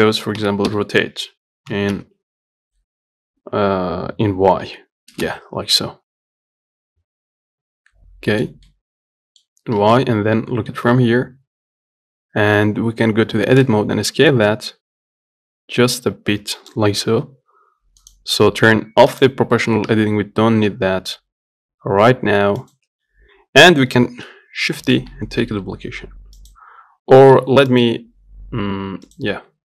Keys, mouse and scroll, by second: 0.7 r, 6.1-10.2 middle drag, 10.2 KP_1, 12.8 scroll up 2, 13.1 Tab, 13.6 s, 17.1 g, 19.4 click, 20.2 g, 24.4 shift+d, 29.1 Tab, 29.3 click.